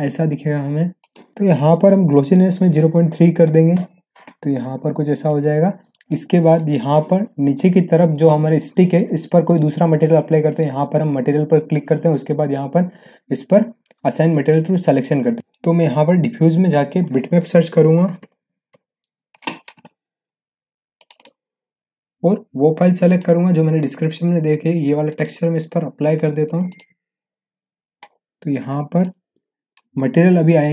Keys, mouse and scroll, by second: 1.0 click, 5.2-6.2 middle click, 6.5 click, 14.8 click, 17.7-19.2 typing, 20.9 click, 28.0-28.3 scroll down 1, 29.0-29.9 middle drag.